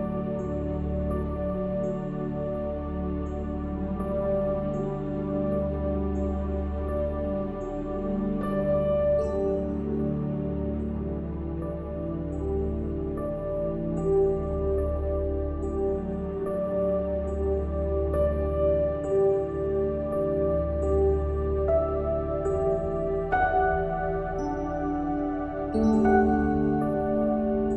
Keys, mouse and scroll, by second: 0.7-5.0 middle drag, 5.1-6.9 drag, 7.1 s, 11.4 s, 14.9-16.3 middle drag, 17.2-20.7 drag, 20.7-22.8 middle drag, 22.6 KP_1, 24.1 r.